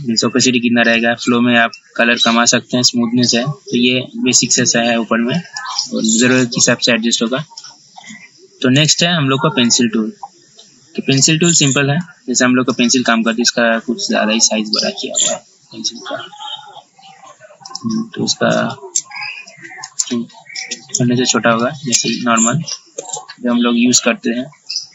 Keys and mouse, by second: 8.9 right click, 9.8-24.9 drag.